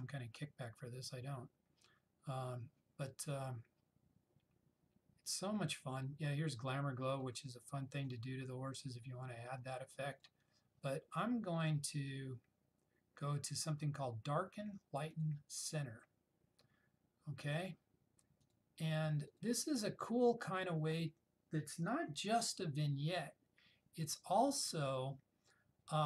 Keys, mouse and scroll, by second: 7.6 click, 10.8 click, 15.3 click, 18.5 click.